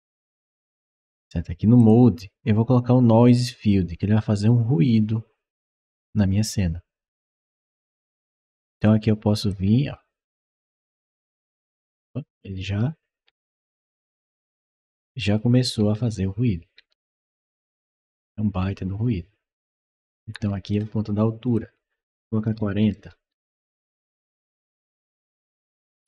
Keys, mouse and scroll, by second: 1.6 click, 3.1 click, 8.7 click, 9.8 click, 11.6-20.5 right drag, 13.6 d, 15.1 w, 15.7 s, 17.1 w, 17.6 d, 18.2 s, 19.8 w, 20.4 s, 21.3 click, 22.5 4, 22.8 0, 23.0 Return, 24.4-26.0 right drag, 24.7 d, 25.8 s.